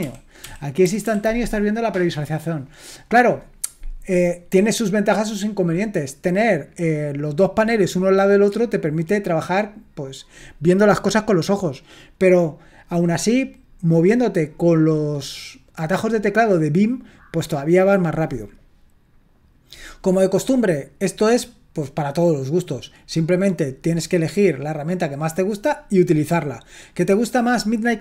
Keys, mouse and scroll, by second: 0.4 Up, 0.8 Down, 1.1 Down.